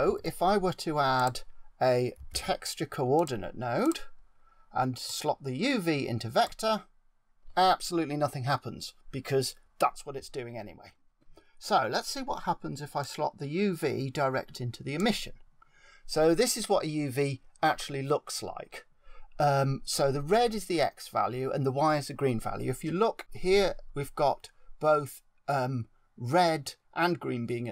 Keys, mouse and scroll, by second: 5.0 click, 12.9 click, 18.0-21.7 scroll down 3, 24.1-27.2 scroll down 1.